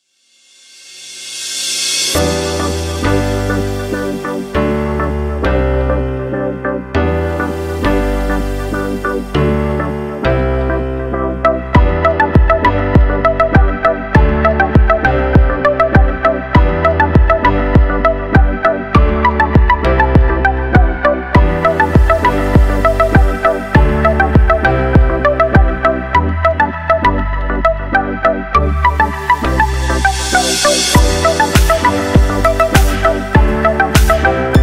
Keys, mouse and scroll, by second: 0.3-0.8 drag, 0.8-2.2 scroll down 2, 2.2-4.2 drag, 6.2-7.8 scroll up 7, 7.8 click, 10.0-10.6 drag, 10.6-11.5 scroll down 1, 11.5-13.5 drag, 13.5-14.0 middle drag, 14.0-14.3 scroll up 2, 14.3-16.4 middle drag, 16.6-17.6 scroll down 8, 17.6 click, 18.2 g, 19.7-20.5 scroll up 8, 20.5 shift+middle click, 21.3 click, 22.7-23.2 scroll down 2, 24.0-25.9 drag, 25.9-28.1 middle drag, 28.1-29.1 scroll down 5, 29.4-31.6 scroll down 8, 31.6-33.6 middle drag.